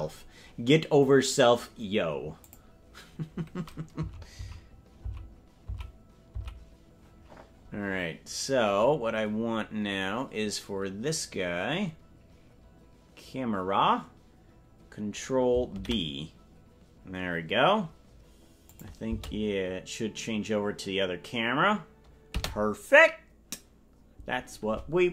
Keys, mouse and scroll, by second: 1.7-2.2 scroll up 2, 2.2 scroll up 3, 2.4 click, 4.1 Left, 4.5 Left, 6.8 Left, 9.3 scroll down 1, 9.4 scroll up 2, 9.6 scroll down 1, 9.7-14.3 scroll up 2, 18.0 ctrl+b, 18.7 click, 19.0 space, 22.4 space.